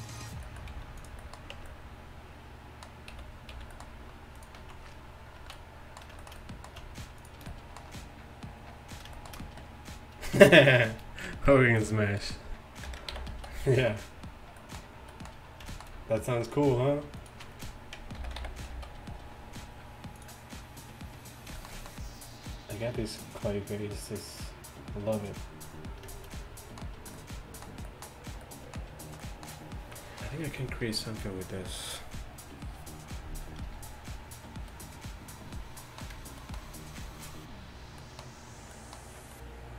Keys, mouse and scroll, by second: 0.8 g, 1.6 Tab, 3.2 a, 3.6 a, 4.6 click, 4.6 z, 5.3 click, 5.4 z, 5.6 drag, 7.5-9.0 middle drag, 12.9 ctrl+l, 13.4 a, 16.6-18.2 drag, 18.2 ctrl+l, 18.2 right click, 18.8 click, 18.8 a, 20.2 click, 21.5-25.1 middle drag, 25.7 middle drag, 26.0-27.3 middle drag, 28.7-30.2 middle drag, 33.8-34.7 middle drag.